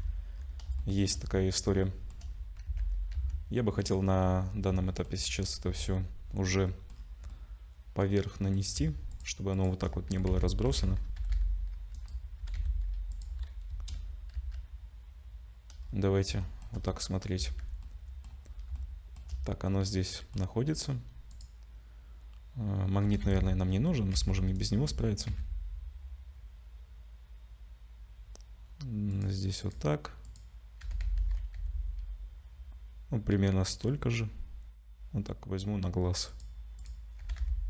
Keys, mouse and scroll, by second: 0.0-0.7 scroll down 7, 0.8 shift+middle click, 1.2-1.6 scroll down 3, 1.9 shift+middle click, 2.3-2.7 scroll down 2, 2.7 ctrl+s, 3.1 z, 3.6 middle click, 4.2-4.8 scroll down 6, 4.9 shift+middle click, 5.7 KP_Decimal, 6.2-6.7 scroll down 3, 6.9 middle click, 6.9-7.4 scroll down 4, 7.3 middle click, 9.1 shift+click, 9.5 shift+click, 10.1 g, 12.4 g, 13.7 KP_0, 14.3 z, 15.8-16.3 scroll up 3, 16.4 shift+middle click, 16.8-17.4 scroll up 3, 17.4 z, 17.8 middle click, 18.4-18.8 scroll up 3, 18.8 shift+middle click, 19.7 middle click, 21.3 click, 23.0 g, 24.9 g, 29.6 click, 30.2 click, 30.8 g, 36.8 click, 37.2 g.